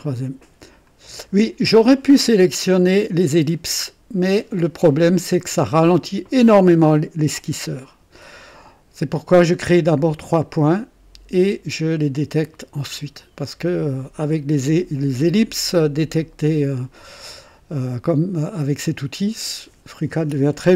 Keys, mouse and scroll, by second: 0.8 click.